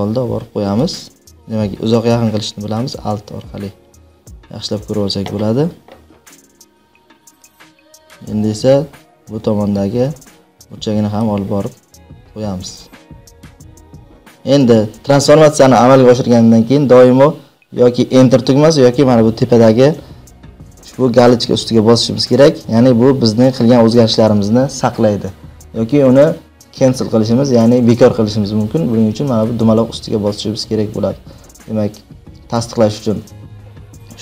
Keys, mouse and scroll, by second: 0.6 click, 2.3-3.2 alt+scroll, 4.2-4.9 alt+scroll, 11.1-14.0 drag, 14.1 click, 14.3 alt+scroll.